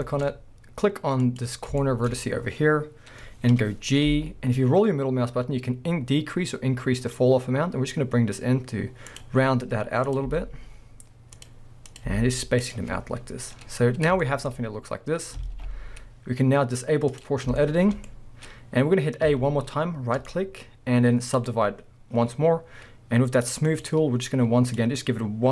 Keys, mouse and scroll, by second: 0.1 shift+middle click, 0.3 scroll up 1, 1.2 click, 1.8-6.4 shift+middle drag, 4.1 g, 6.4 right click, 9.2 click, 10.1 click, 10.3 g, 11.9 click, 12.0 g, 12.8 click, 13.0 scroll down 1, 14.2-17.1 shift+middle drag, 15.0-15.4 scroll up 2, 15.4 alt+a, 17.1 click, 17.5 scroll down 2, 17.6-20.2 shift+middle drag, 19.3 a, 20.2-23.7 right drag, 21.7 scroll down 1, 22.7 scroll up 1, 23.7-25.0 drag.